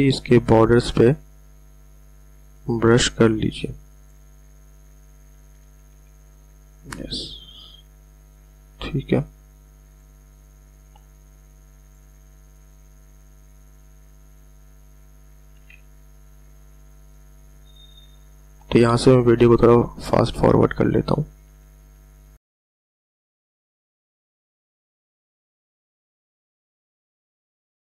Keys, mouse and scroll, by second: 5.9 x, 8.2 click, 16.6 [, 17.5 click, 19.9 ], 20.2 ], 20.8 click, 21.6 [, 21.8 [, 22.1 click, 24.3-25.2 typing, 24.4 click, 24.8 click, 25.0 click, 25.2 click.